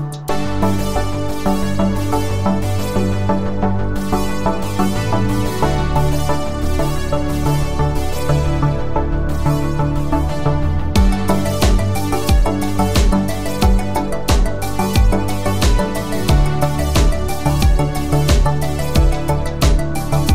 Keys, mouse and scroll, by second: 0.4 click, 10.0-10.6 scroll down 1, 16.3 click, 18.5 click, 19.6 right click.